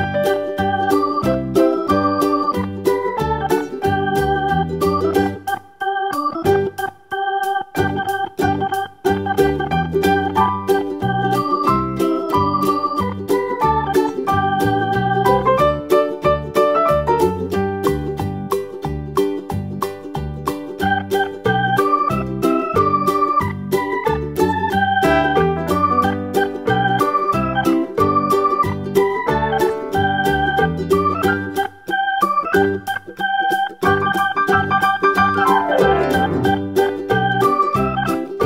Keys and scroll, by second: 3.8 Page_Up, 4.0 Page_Up, 4.4 Page_Down, 4.5 Page_Down, 8.9 BackSpace, 9.7 Right, 36.9 super+c, 37.0 super+v.